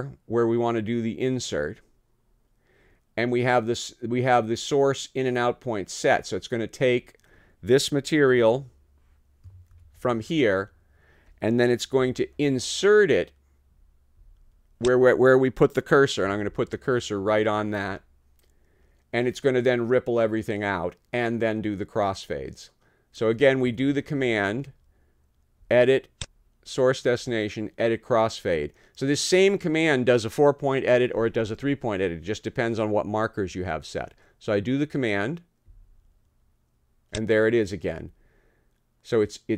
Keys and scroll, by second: 8.3 F4, 9.8 t, 12.0 d, 16.2 b, 23.7 Return.